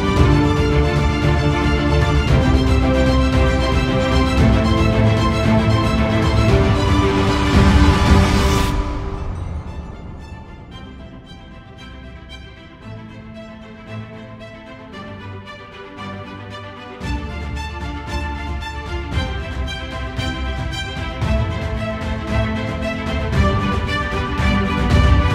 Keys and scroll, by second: 0.6 ctrl+space, 11.5 ctrl+space, 13.9 ctrl+0.